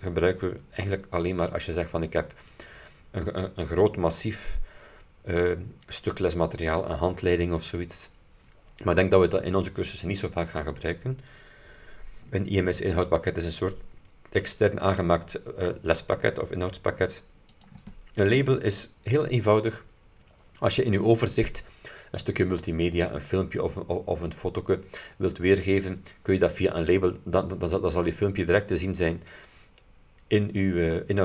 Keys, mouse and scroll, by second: 17.6 click.